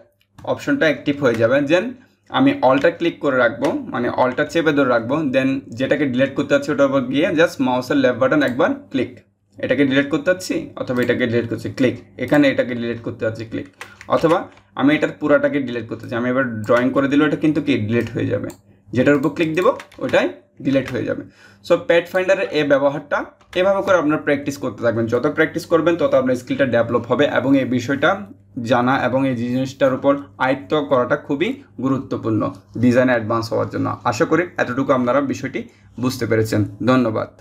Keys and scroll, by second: 13.8 ctrl+alt+z.